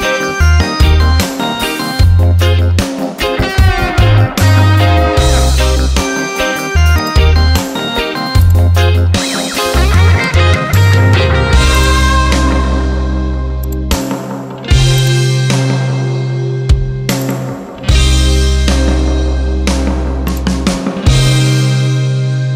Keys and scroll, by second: 5.0 Return, 18.5 ctrl+z.